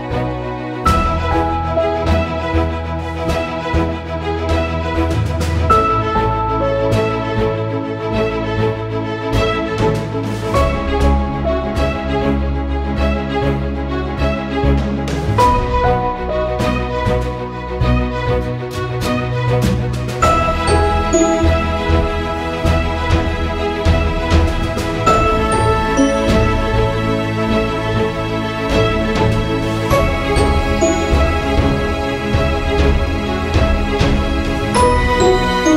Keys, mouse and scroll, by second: 7.1-21.1 drag, 22.1 click, 28.5-31.0 drag, 32.4 click.